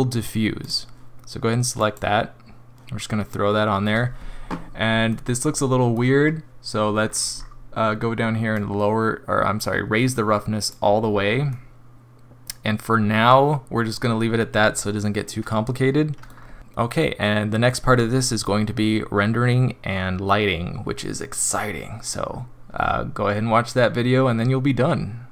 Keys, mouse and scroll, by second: 2.0 click, 5.0 middle click, 5.2 middle click, 7.0-7.5 scroll down 7, 8.5 click, 11.0 scroll up 3, 11.5 middle click, 15.8 middle click, 16.3 scroll down 2, 16.6 middle click, 16.8 middle click, 17.4 middle click, 17.6 middle click.